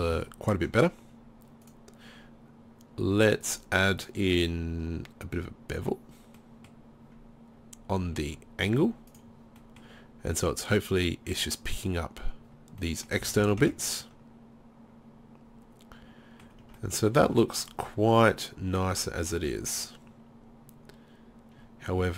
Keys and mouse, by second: 1.7 click, 9.1 click, 9.7-12.8 middle drag, 13.2 z, 13.4 z, 13.7 Tab, 15.9 middle drag, 16.7 Tab.